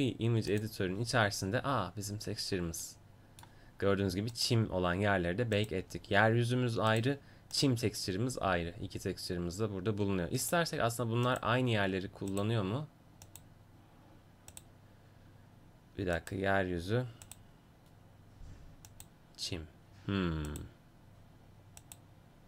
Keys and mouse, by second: 17.2-22.4 drag.